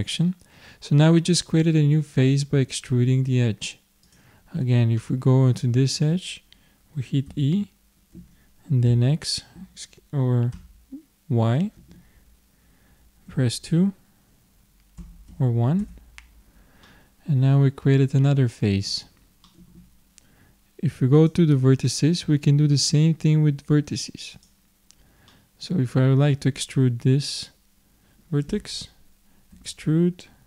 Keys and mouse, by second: 4.0-6.0 drag, 5.7-7.3 middle drag, 7.3 e, 16.8-21.2 middle drag, 21.2-22.9 drag, 24.3-26.0 drag, 26.0 middle click, 26.2-29.5 middle drag, 29.5 e.